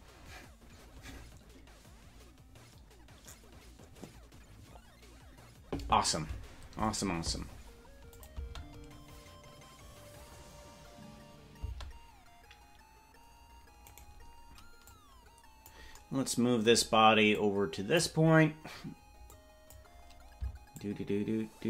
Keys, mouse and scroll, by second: 8.1-11.7 drag, 11.7 space, 14.9 click, 14.9 right click, 17.3 click, 19.3 click, 20.7-21.6 shift+drag.